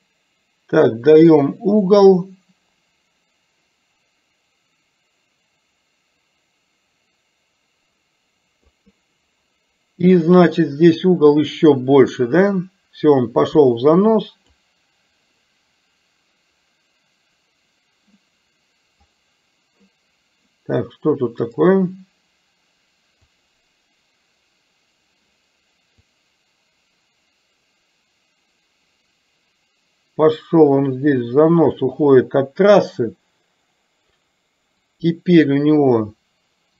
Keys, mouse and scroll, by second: 10.7-14.7 drag, 15.5-18.3 right drag, 19.2 right click, 21.6-23.6 right drag, 26.2-32.0 drag, 35.0-36.7 drag.